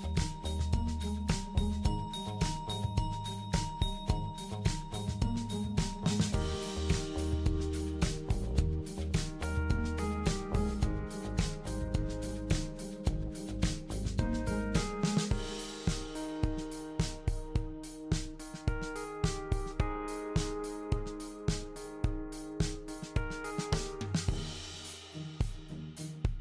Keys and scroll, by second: 3.1 super+c, 3.7 super+v, 10.0 super+c, 10.1 super+v.